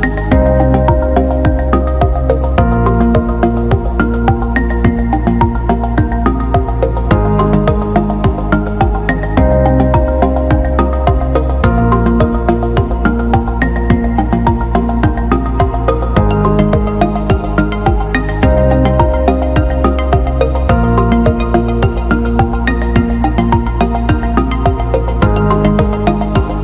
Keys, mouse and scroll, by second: 10.4-12.9 drag, 13.4 click, 21.7 middle click, 22.1-23.3 alt+middle drag, 24.2 click, 25.0 click, 25.2 click, 25.5 click, 25.8 click.